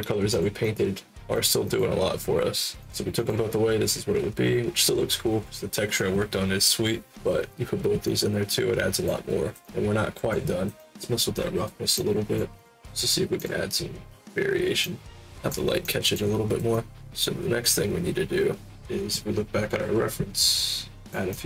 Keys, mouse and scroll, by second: 0.2 click, 0.6 click, 1.3 click, 1.6 click, 2.7 click, 3.1 click, 8.0-9.0 alt+drag, 9.6 alt+click, 10.7 alt+click, 11.9 click, 12.5 click, 13.3 click, 14.8-15.4 drag, 15.7 alt+click, 16.7 alt+click, 17.1-18.7 shift+drag, 20.9 click, 21.3 click.